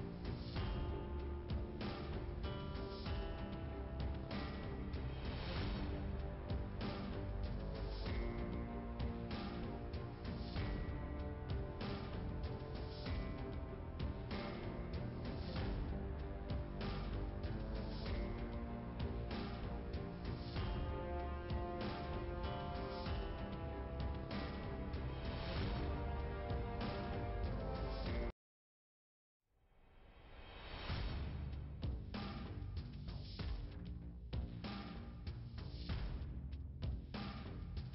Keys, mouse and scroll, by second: 0.4-0.7 scroll down 2, 3.6 click, 8.4 scroll down 2, 10.9-11.5 scroll up 1, 11.7 middle click, 16.0 click, 16.9-18.9 scroll down 2, 19.7 click, 21.5 click, 22.6 2, 25.0 click, 26.1 click, 27.7 ,, 28.6 click, 30.2 Delete, 31.9 scroll up 2, 32.6 click, 33.5 scroll down 2, 35.3 click.